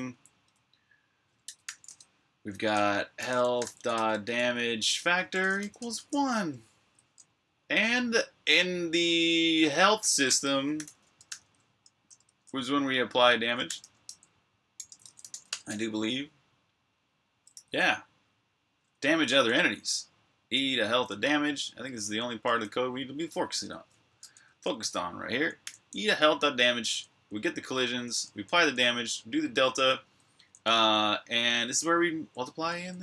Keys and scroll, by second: 1.0-7.9 typing, 4.8 Tab, 6.6 super+b, 10.1-11.9 typing, 13.2-15.7 typing, 17.4 n, 18.8-19.6 typing, 20.8 n, 23.9-25.4 typing, 26.8-28.4 typing, 29.6-30.9 typing, 32.1-33.0 typing.